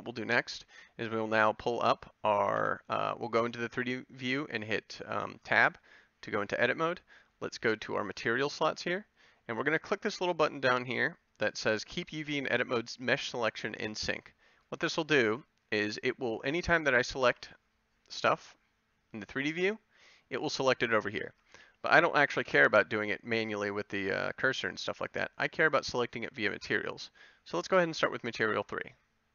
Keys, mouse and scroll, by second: 2.6 Tab, 17.2 c, 22.6 a.